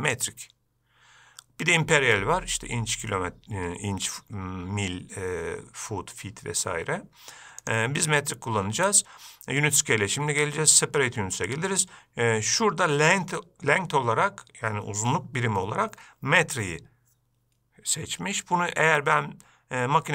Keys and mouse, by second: 0.3-8.1 drag, 16.7-20.1 drag.